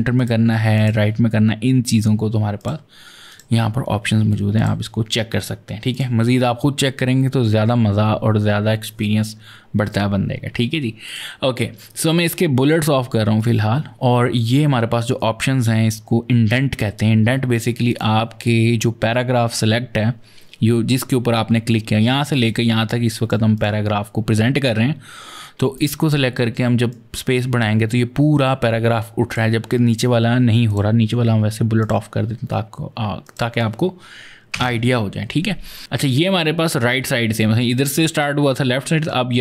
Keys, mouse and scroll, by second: 0.0 click, 0.5 click, 2.4 click, 3.1 click, 4.4 click, 5.7 click, 10.8 click, 13.2 click, 17.6 click, 22.2 click, 23.3 click, 25.5 click, 26.7 click, 30.5 click, 31.6 click, 33.0 click, 34.3 Return.